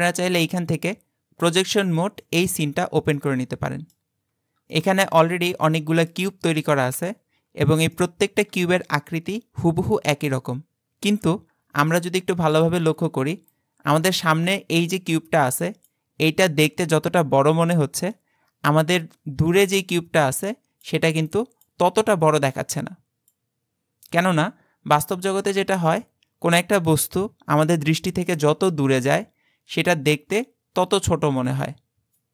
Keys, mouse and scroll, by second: 0.0 click, 3.2-4.3 middle drag, 4.3-4.7 scroll up 1, 4.7-5.4 shift+middle drag, 5.4-5.8 scroll up 1, 5.8-7.5 middle drag, 7.5-8.0 scroll up 2, 8.0-10.9 shift+middle drag.